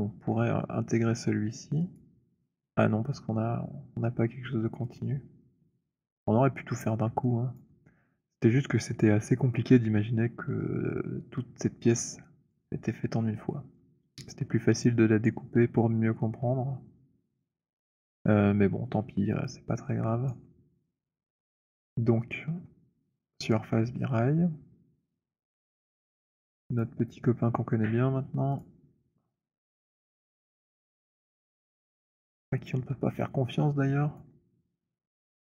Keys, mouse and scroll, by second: 1.9 click, 4.8 click, 7.2 alt+click, 12.6 alt+click, 19.2 alt+click, 20.5 alt+click, 23.7 click, 26.8 click, 30.8 click, 32.7 click, 34.3 alt+click, 35.2 click.